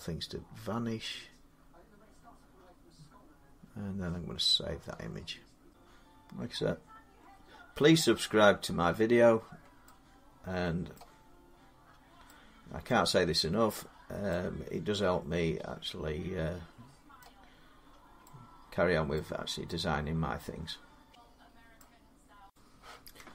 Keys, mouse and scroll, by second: 5.5 middle click, 5.5 scroll, 9.3 scroll down 1, 9.6 middle click, 9.9 scroll down 1, 10.3 middle click, 10.7 middle click, 11.4 middle click, 11.5 middle click, 12.7 middle click, 14.2 scroll, 15.9 middle click, 17.0 middle click, 17.4 middle click, 17.5 middle click, 17.6 scroll, 19.0-21.2 middle click, 20.2 scroll up 4, 20.9 scroll down 5, 21.5 middle click, 22.3 click.